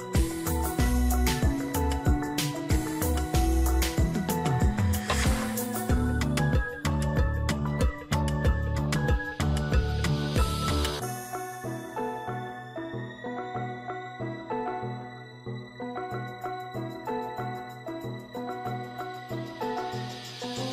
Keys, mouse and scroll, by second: 18.0 ctrl+=, 18.6 ctrl+=.